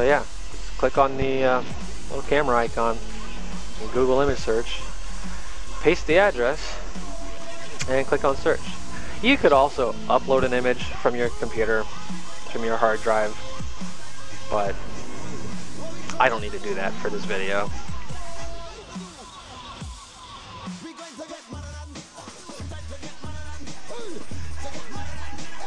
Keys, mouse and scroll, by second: 2.6 click, 16.0 click.